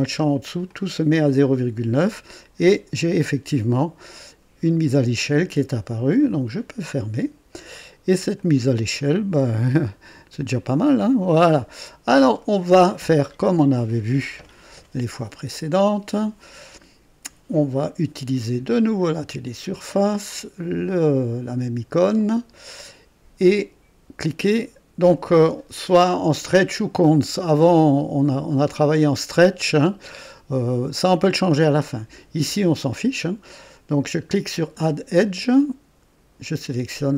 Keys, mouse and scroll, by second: 0.6 click, 6.8 click, 7.7 click, 8.3-11.7 drag, 11.8 scroll up 1, 12.3 right click, 19.0 click, 22.1 click, 34.7 click, 36.6 click.